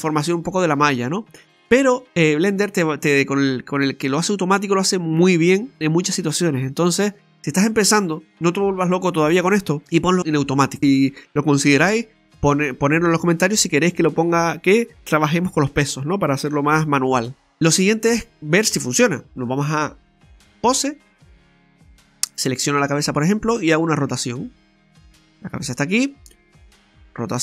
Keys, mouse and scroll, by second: 17.4 middle click, 18.2 middle click, 19.8 click, 20.9-21.3 scroll down 2, 21.2 middle click, 22.3 right click, 22.8 middle click, 24.2 r, 26.5 right click, 26.6 r.